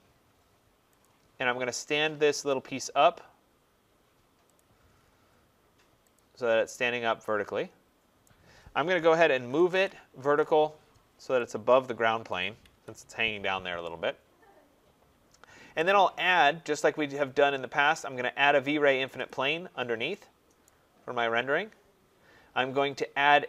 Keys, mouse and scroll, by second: 0.9 click, 2.3 click, 4.8-5.6 scroll, 6.0 click, 6.7 middle click, 8.1 right click, 8.9-10.2 typing, 11.4 click, 12.3 click, 12.6 Escape, 13.8 typing, 15.1 typing, 15.6 right click, 19.1 click, 20.5 right click, 20.9 scroll, 21.0-21.4 scroll down 3, 21.4 scroll up 4, 21.6 middle click.